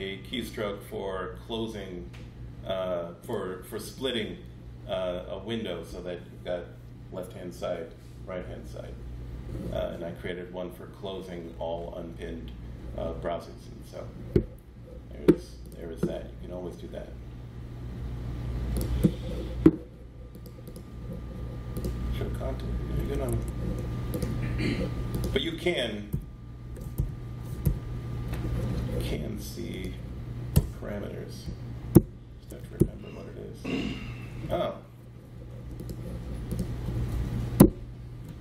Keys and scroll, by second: 23.2 ↺, 26.0 super+p, 26.8 alt+p, 27.5 ctrl+p, 30.4 BackSpace, 31.8 shift+super+p, 32.7 alt+super+p, 37.4 alt+super+p.